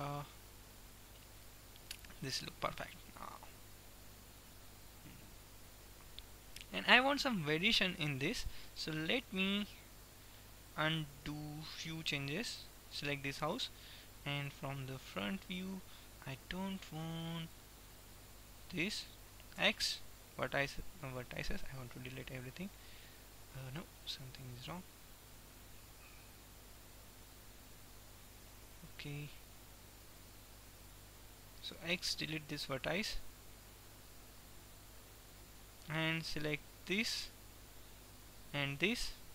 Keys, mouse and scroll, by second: 0.2 Tab, 0.9-2.6 middle drag, 6.9 click, 7.2-8.4 middle drag, 9.7 middle click, 11.9 Tab, 13.1 Tab, 13.6 click, 13.7-14.7 middle drag, 15.2 KP_1, 18.7 click, 19.6-20.6 right drag, 19.7 x, 22.1-24.1 middle drag, 25.7 ctrl+z, 26.7 ctrl+z, 27.2 ctrl+z, 30.9-32.7 right drag, 32.1 x, 33.6-35.1 middle drag, 36.2 click, 36.9-38.1 middle drag, 38.6-39.3 middle drag.